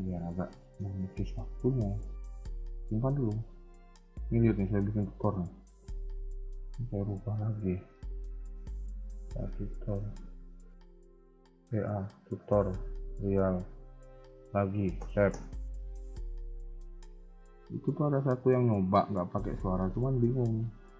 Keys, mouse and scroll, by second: 0.5 shift+middle click, 0.8 scroll up 1, 1.4 ctrl+s, 1.4 scroll up 1, 19.3 click.